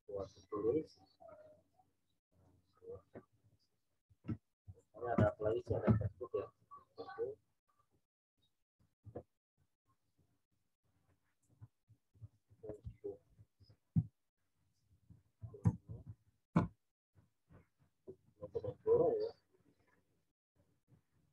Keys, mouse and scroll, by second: 0.4 click, 3.2 z, 3.6 alt+click, 11.0 click, 11.8-12.7 typing, 14.5-15.8 typing, 16.5 Return, 20.5 click.